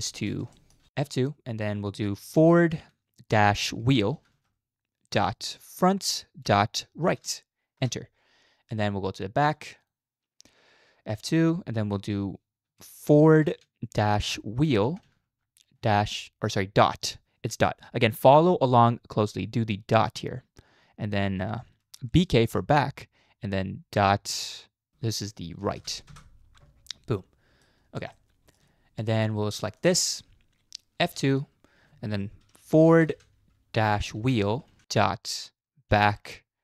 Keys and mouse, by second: 0.0 middle drag, 0.6 shift+middle click, 1.0 F2, 4.3 e, 8.8-9.4 shift+middle drag, 9.8-11.1 drag, 11.1 F2, 15.0 e, 27.1-27.6 middle drag, 28.1-28.6 shift+middle drag, 31.1 F2, 34.8 e.